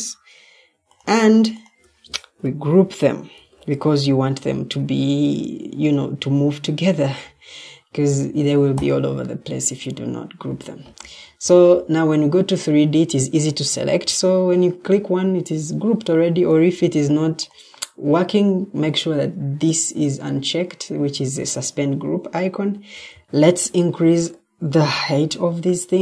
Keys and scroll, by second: 3.3 ctrl+g, 10.9 Escape.